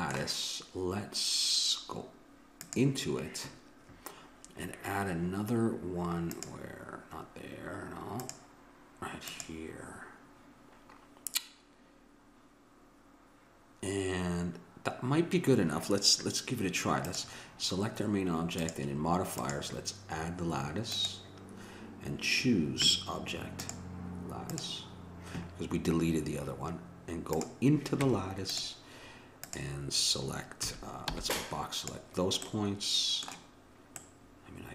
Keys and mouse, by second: 2.6-4.6 drag, 6.3-11.1 drag, 17.1-21.3 drag, 23.7-25.5 drag, 27.3-29.1 drag, 28.0 Tab, 29.4-30.6 drag, 30.6 a, 31.1 b, 32.4-34.7 middle drag.